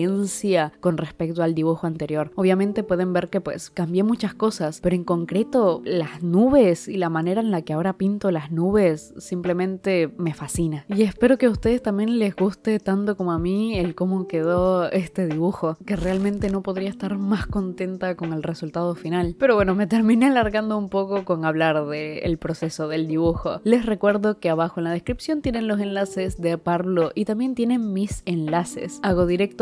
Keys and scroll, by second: 0.0 space, 4.5 i, 5.2 i, 7.0 i, 7.7 ], 8.9 i, 10.6-12.0 typing, 13.3 space, 14.8 i, 15.2 ctrl+z, 15.6 ctrl+z.